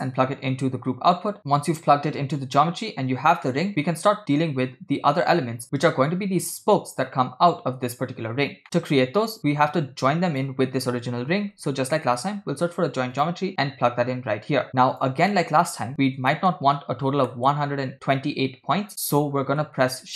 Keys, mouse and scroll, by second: 8.6 middle click, 8.6-9.0 scroll up 2, 9.5 shift+a, 15.4 middle click, 16.4 middle click, 16.8-17.3 scroll up 4, 17.4 middle click, 17.7 scroll down 1, 19.0 middle click, 19.0 scroll down 2, 19.8 shift+a.